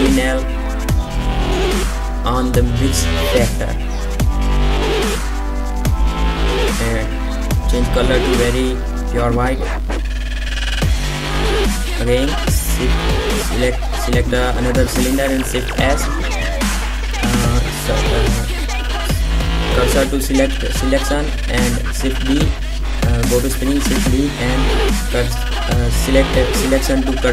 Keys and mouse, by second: 3.8-9.1 drag, 9.1 middle click, 10.5-12.3 right drag, 12.3 shift+s, 16.1 right click, 18.3 shift+d, 20.4 shift+s.